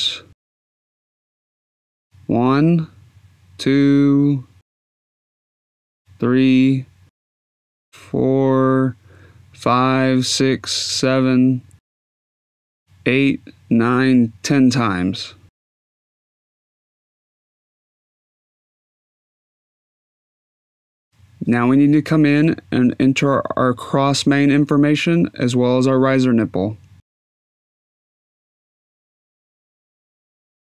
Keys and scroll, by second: 17.3 Tab, 18.2 1, 18.5 0.